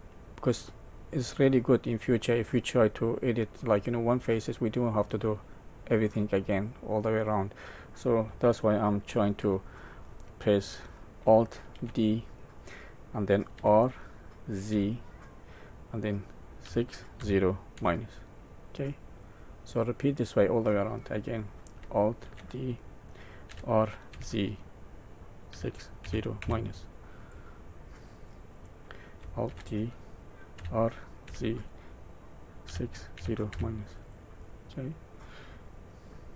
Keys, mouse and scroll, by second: 6.5 middle click, 9.3 Tab, 10.2 middle click, 11.7 alt+d, 19.7 middle click, 22.2 alt+d, 27.7 middle click, 29.4 alt+d, 34.4 middle click.